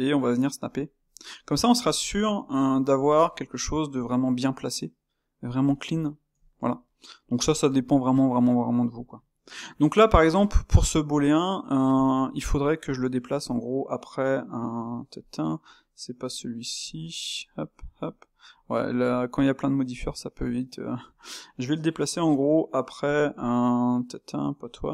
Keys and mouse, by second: 1.8 click, 3.2 shift+q, 3.4-10.2 middle drag, 10.2-13.0 drag, 14.8 click, 15.2 click, 16.3 click, 17.4 click, 17.9 click, 18.6 click, 19.2 click, 19.9 click, 20.5 click, 21.2-24.9 drag.